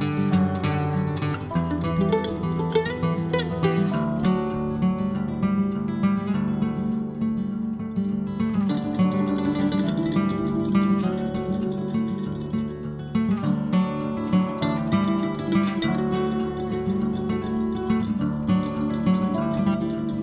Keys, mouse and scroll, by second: 0.0 r, 1.6 l, 3.8-6.9 drag, 6.9-8.0 middle drag, 8.0-9.6 drag, 10.1 KP_3, 11.3 click, 12.3-13.6 drag, 14.2-15.6 drag, 15.6 p, 19.3 click.